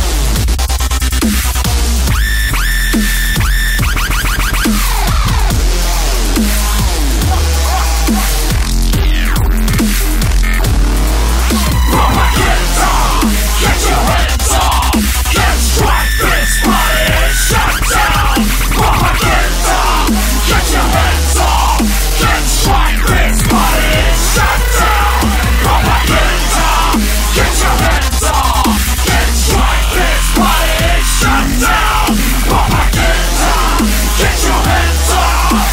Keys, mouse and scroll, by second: 0.3-2.5 typing, 4.2-6.8 typing, 7.9 BackSpace, 9.1-12.4 typing, 13.4-15.2 typing, 19.4-23.2 typing, 25.7 click, 26.1 click.